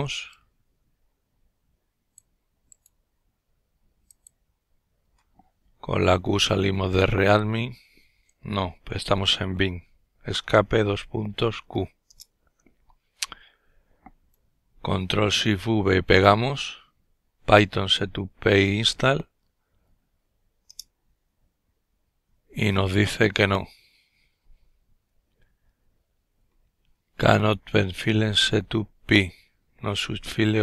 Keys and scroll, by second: 6.1 q, 7.3 Escape, 9.2 shift+;, 10.3 q, 10.9 Return, 12.2 typing, 14.2 ctrl+v, 19.7 Return.